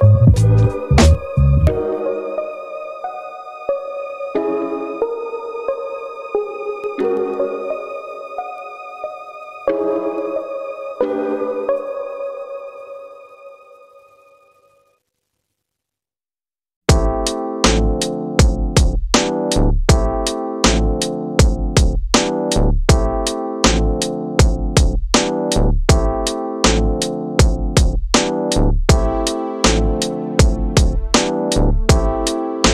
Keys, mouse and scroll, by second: 2.9 click, 4.4 click, 5.3 click, 5.5 click, 9.9 middle click, 10.7-11.2 scroll up 2, 11.4 ctrl+middle click, 12.4 middle click, 13.3 ctrl+middle click, 13.3-13.7 scroll up 1, 13.9 middle click, 16.0-19.4 drag, 19.8-20.7 scroll down 14, 20.7-21.8 middle drag, 22.4-27.0 drag, 27.5 middle click, 28.1-28.7 scroll up 9, 28.7 middle click, 30.7 click, 31.9 g.